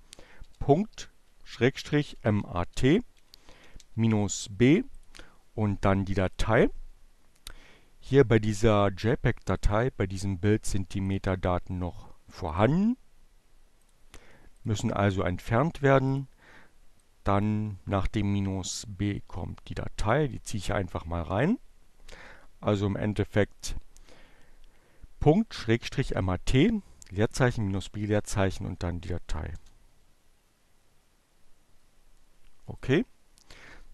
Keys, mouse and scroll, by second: 0.0-1.0 typing, 2.3-3.1 typing, 5.6 click, 7.4-9.6 right drag, 10.6 click, 12.1 click, 13.4 click, 14.0 click, 15.5 click, 16.2-18.9 drag, 19.2 click, 20.4 BackSpace, 28.1 Return, 32.3 click, 33.5 click.